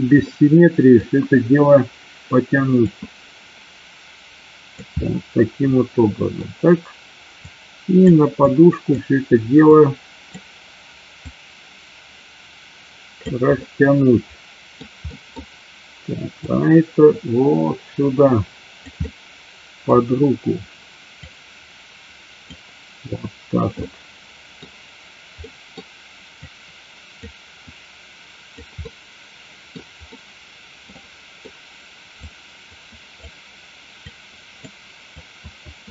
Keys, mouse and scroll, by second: 0.5 middle click, 3.0-5.0 drag, 5.1-6.5 middle drag, 7.6 click, 8.6 click, 9.9 click, 11.2-13.4 drag, 13.8-14.9 middle drag, 15.1 middle click, 16.5-18.9 drag, 19.0 middle click, 21.2-22.6 drag, 24.0 middle click, 25.5 middle click, 26.5 click, 27.7 click, 28.8 middle click, 30.1 middle click, 31.0 middle click, 32.2 click, 34.1 click, 35.2-35.9 drag.